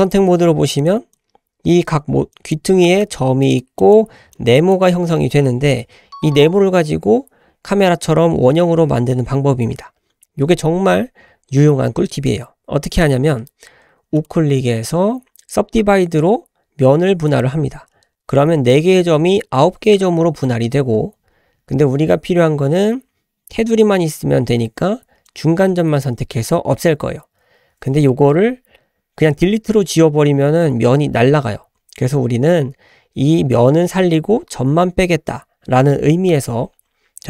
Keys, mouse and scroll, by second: 0.8 click, 1.1-1.8 drag, 2.3-7.4 drag, 14.2-19.8 right drag, 25.3 click.